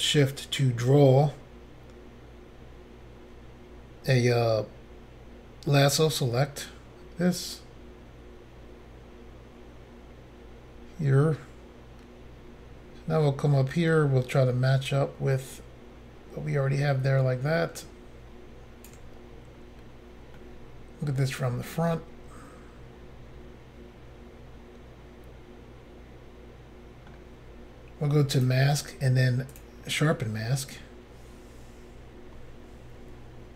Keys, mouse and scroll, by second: 0.6 ctrl+click, 20.4 middle click, 28.4 click, 28.5 click, 29.5 click, 29.6 click.